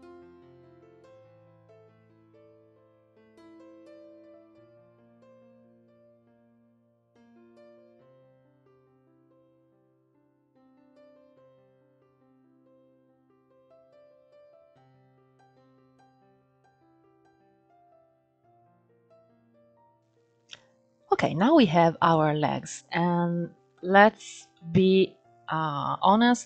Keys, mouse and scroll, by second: 0.0-4.1 typing, 2.9 scroll up 2, 3.3 shift+middle click, 3.4 scroll up 3, 4.4-4.8 scroll down 8, 4.6 shift+middle click, 4.8 scroll up 10, 5.1 ctrl+1, 5.3 alt+z, 5.6 click, 5.9 click, 6.5 click, 7.1 click, 7.3 click, 7.6 click, 7.8 click, 8.4 g, 8.8 scroll down 1, 8.9 shift+middle click, 9.1 ctrl+r, 9.8 shift+middle click, 9.8 scroll down 2, 10.0-10.4 scroll up 3, 10.6 click, 11.1 alt+z, 11.3 alt+z, 11.4 click, 11.7 click, 12.2 alt+z, 12.3 click, 12.6 scroll down 8, 12.8 Tab, 12.9 middle click, 13.7 scroll up 2, 14.0 Tab, 14.1 click, 14.3 KP_Decimal, 14.4 scroll down 20, 14.7 middle click, 15.0 alt+z, 15.0 middle click, 15.4 click, 15.8 middle click, 16.0 s, 16.5 click, 17.0 alt+shift+click, 17.2 alt+z, 17.4 alt+shift+click, 17.6 shift+middle click, 17.8 s, 18.2 middle click, 18.5 ctrl+z, 18.7 middle click, 18.8 s, 19.3 middle click, 19.4 Tab, 19.5 middle drag, 19.7-20.1 scroll down 6, 19.8 shift+middle click, 20.1-20.8 scroll up 1, 20.8 scroll up 1, 22.2-23.4 scroll down 1, 23.4-26.4 shift+middle drag.